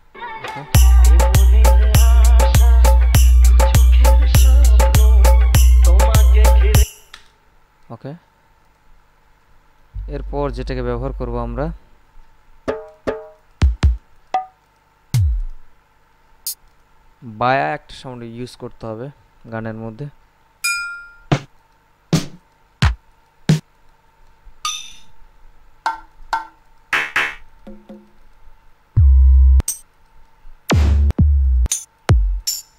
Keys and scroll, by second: 0.3 space, 7.2 space.